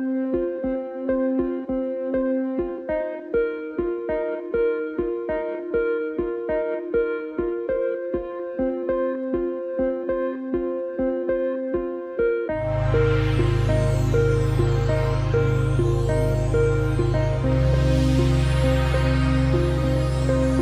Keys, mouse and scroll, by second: 0.0-0.5 typing, 1.0 click, 5.1 click, 7.8 alt+scroll down 1, 8.1 click, 8.8 alt+space, 9.0-9.8 alt+scroll up 3, 9.3 click, 9.9 click, 12.1 click, 13.9 g, 14.2 alt+scroll down 1, 14.4 click, 15.2 space, 15.4 click, 15.6 space, 15.8 click, 16.2 space, 16.5 click, 17.7 F9, 17.8 click, 17.9 space, 18.0 click, 18.3 alt+scroll down 1, 18.5 space, 18.6 click, 18.8 space, 20.0-20.6 alt+scroll up 4, 20.4 click, 20.5 space.